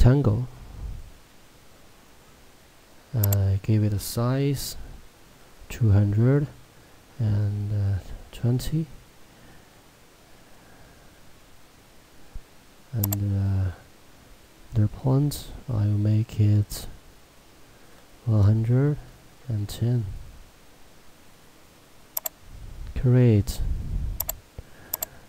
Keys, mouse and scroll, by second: 6.5 Tab, 13.3 click, 18.4 Tab, 22.2 click.